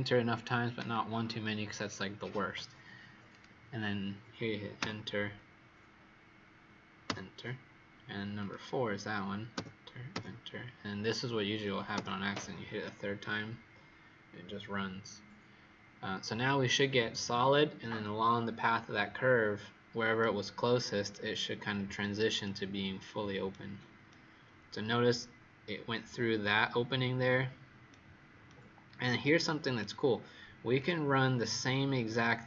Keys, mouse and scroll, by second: 3.2 click, 4.7 Return, 8.3 click, 9.5 Return, 10.0 Return, 11.9 Return, 20.1 right click, 21.5-22.3 scroll up 5, 22.3 right click, 24.0 right click, 30.7 click.